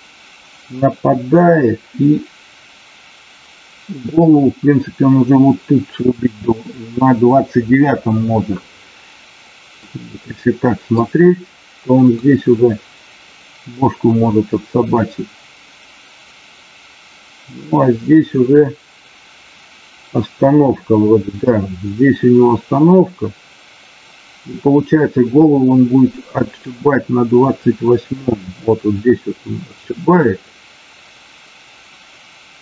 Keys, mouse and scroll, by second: 9.7-10.8 middle drag, 12.1-32.6 drag.